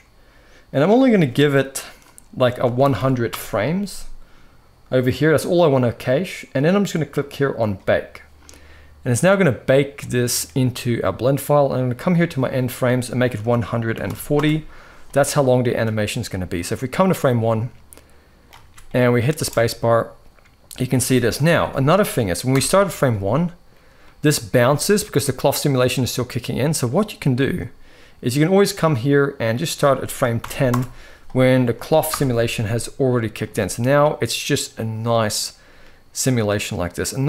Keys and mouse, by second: 0.5-3.1 drag, 2.7 o, 9.7 middle click, 11.8-14.2 drag, 15.4 middle drag, 16.0-16.6 middle drag, 16.8-18.2 drag, 18.3 ctrl+s, 18.6 middle click, 19.1 space, 20.7 space, 22.3 shift+Left, 23.0 middle click, 23.7 middle click, 24.3 space, 24.9-26.6 middle drag, 27.0 space, 29.2-30.4 drag, 31.8 shift+Left, 32.8 middle click, 33.1 space, 34.5 middle click, 35.2-36.2 middle drag.